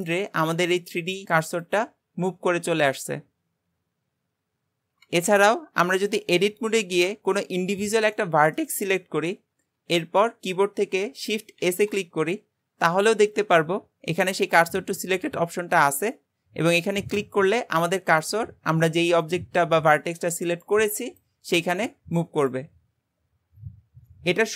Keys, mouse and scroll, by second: 5.7-6.1 scroll up 2, 6.1 click, 7.6 click, 8.2-11.3 shift+middle drag, 11.7 shift+s.